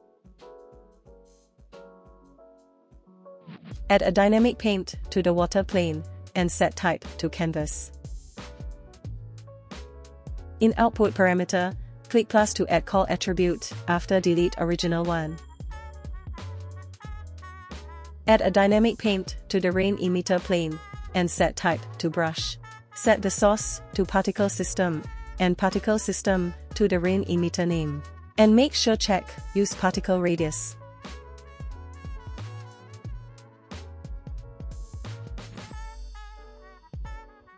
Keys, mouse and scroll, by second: 2.4 click, 3.6 click, 4.7 click, 10.8 click, 11.8 click, 12.4 click, 12.9 click, 13.5-14.8 drag, 15.4-16.4 drag, 17.8 click, 18.5 click, 19.4 click, 20.7-21.4 drag, 21.7 click, 23.3-24.9 drag, 25.4 click, 27.9 click, 29.7 shift+Left, 29.7 middle click, 29.7 scroll down 1, 29.7 space, 29.9 click, 34.4-35.3 shift+middle drag, 35.5 middle click, 37.3 click.